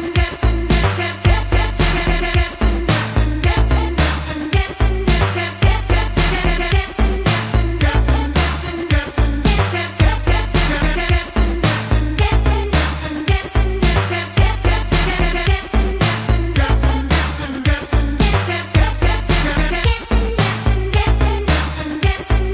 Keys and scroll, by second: 3.2 F18, 7.3 F19, 10.4 F19, 12.9 F19, 15.0 F18, 18.3 F19, 21.2 F19.